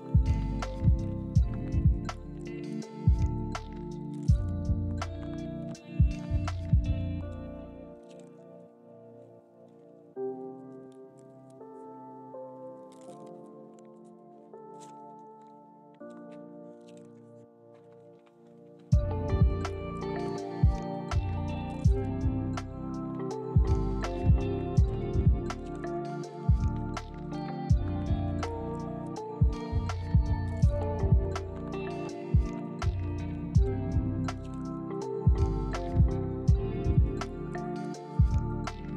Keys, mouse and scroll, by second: 1.0 g, 1.3 r, 1.6 ctrl+click, 1.7 g, 3.1 g, 3.3 s, 6.9 g, 7.8 g, 8.1 s, 10.3 g, 11.2 r, 12.2 g, 12.5 s, 13.8 s, 16.0 g, 20.2 s, 24.1 scroll down 1, 24.2 shift+middle click, 24.3 scroll up 1, 24.6 shift+middle click, 26.3 scroll up 1, 26.4 shift+middle click, 27.1 right click, 28.1 middle click, 28.3 scroll up 1, 28.4 shift+middle click, 28.7 middle click, 36.4-37.3 scroll up 1, 38.0 scroll down 1, 38.1-38.9 scroll up 1.